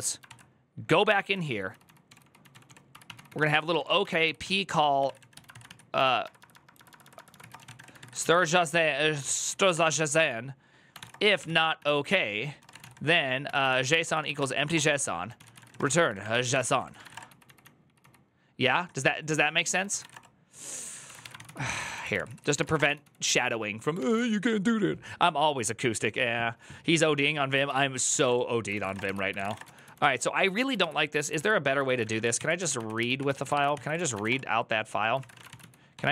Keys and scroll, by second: 0.0-23.3 typing, 27.5 alt+{, 27.6-30.1 typing, 28.5 ctrl+c, 28.7 Return, 28.8 ctrl+u, 31.2 alt+{, 31.5-36.1 typing.